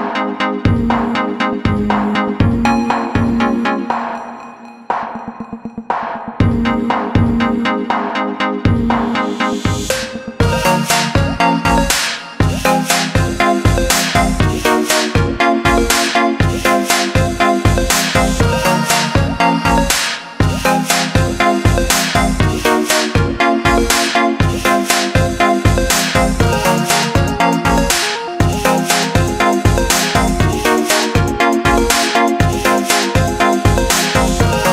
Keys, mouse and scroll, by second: 1.5 click, 3.8 click, 8.0 click, 9.9 click, 11.1 click, 12.0 ctrl+z, 12.5 click, 17.3 click, 18.5 click, 20.0 click, 23.6 Up, 23.9 Right, 24.5 Left, 24.8 click, 28.5 i, 29.0 click, 29.3 a, 29.7 click, 31.3 i, 31.5 click, 31.8 a, 32.7 click, 33.6 i, 34.3 click, 34.4 a.